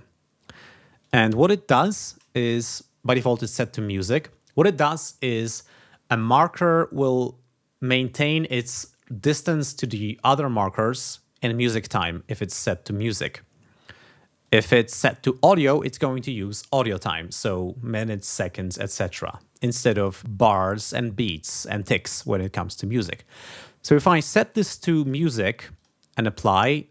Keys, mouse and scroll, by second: 0.9 click, 3.1 click, 14.4 click, 15.7 click, 19.9 click, 24.5 click, 25.0 click, 25.7 click.